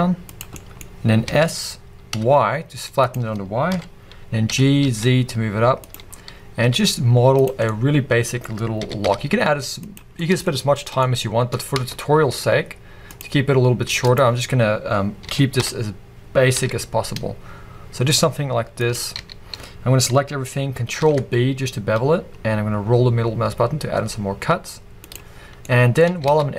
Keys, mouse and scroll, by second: 0.4 click, 0.5-3.1 middle drag, 0.8-1.2 scroll up 2, 1.2 s, 3.1 click, 3.7 KP_1, 4.5 g, 5.9 click, 6.1-6.6 scroll up 1, 6.6 s, 7.6-9.9 middle drag, 8.8 g, 9.9 click, 10.2-11.8 middle drag, 10.5-11.0 scroll up 2, 11.5 scroll up 2, 11.8 Tab, 13.1 click, 14.0 click, 15.3 s, 18.9 click, 19.1 a, 21.0 ctrl+b, 25.1 click, 25.8 middle click, 26.2 alt+a.